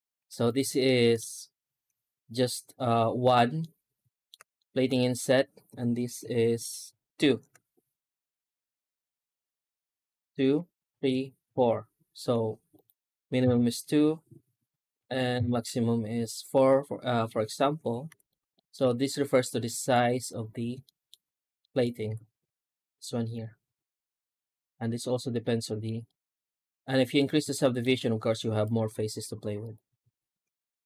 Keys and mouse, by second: 0.1 3, 0.3 right click, 0.6 shift+middle click, 3.5 middle click, 4.4 shift+middle click, 6.7 ctrl+KP_Add, 8.8 right click, 10.1 ctrl+KP_Add, 10.8 ctrl+KP_Add, 11.3 ctrl+KP_Add, 12.6 right click, 13.3 ctrl+KP_Add, 14.8 ctrl+KP_Add, 15.2 ctrl+KP_Add, 17.5 Tab, 17.9 x, 18.4 shift+middle click, 18.9-19.2 middle drag, 19.5 shift+middle drag, 19.7 shift+middle click, 20.1 right click, 20.7 middle drag, 20.9 middle click, 21.1 Tab, 21.5 middle click, 21.9 3, 22.1 right click, 22.7 shift+right click, 23.2 shift+right click, 23.5 shift+right click, 24.2 shift+right click, 24.4 shift+right click, 24.9 shift+right click, 25.2 shift+right click, 25.5 shift+middle click, 25.9 middle click, 26.3 middle click, 27.4 shift+middle click, 28.4 Tab, 28.5 right click, 28.8 x, 29.9 shift+a.